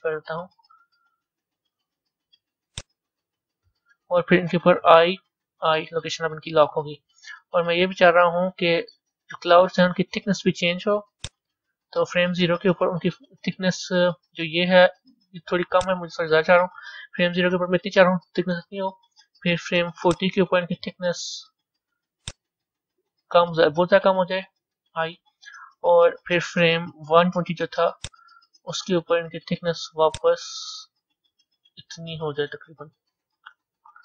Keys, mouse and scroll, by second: 4.9 i, 5.7 i, 7.9-11.1 middle drag, 11.1-18.5 drag, 20.0-20.4 drag, 22.2-24.5 drag, 27.9 click, 30.1 click.